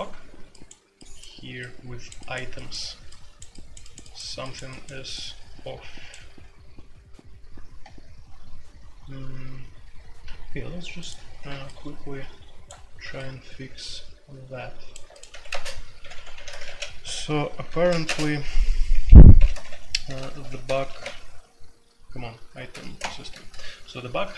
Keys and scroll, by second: 15.3 Escape, 15.4-16.6 typing, 17.8-20.9 typing, 22.7 ctrl+n, 22.7 typing, 23.0 Return.